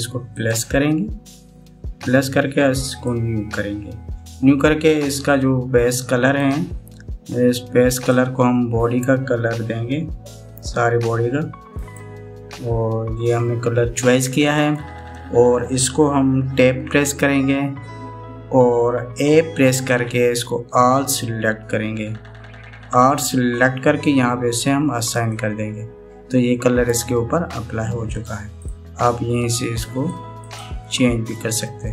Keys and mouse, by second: 1.1 click, 4.0 click, 7.0 click, 17.7 Tab, 22.0 a, 25.9 click.